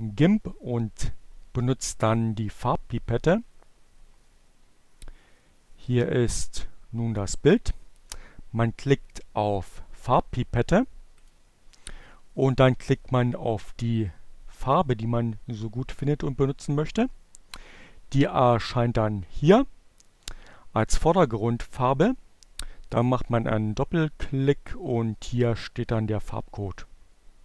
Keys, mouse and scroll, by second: 10.6-12.4 drag, 15.3-17.5 drag, 20.5-22.7 drag, 24.1 click.